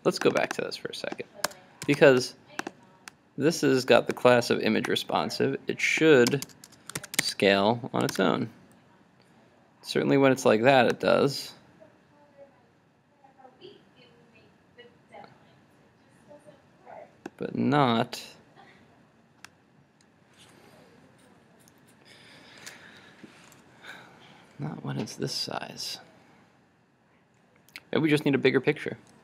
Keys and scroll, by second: 1.9 super+s, 7.0 super+s, 7.3 super+Tab, 8.1 super+r.